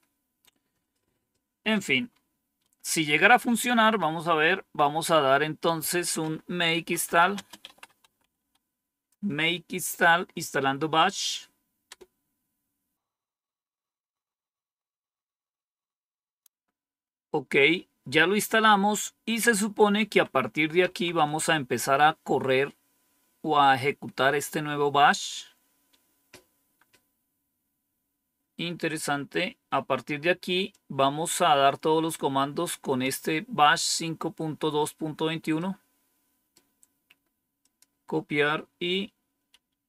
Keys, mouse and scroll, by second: 2.0 scroll down 2, 2.5-3.0 scroll down 2, 3.3 Home, 4.5 Down, 6.4-8.8 typing, 11.8 Return, 19.9 Page_Up, 20.7 Page_Down, 30.6 click, 35.5 right click, 36.8 right click, 37.5 click, 39.4 Up.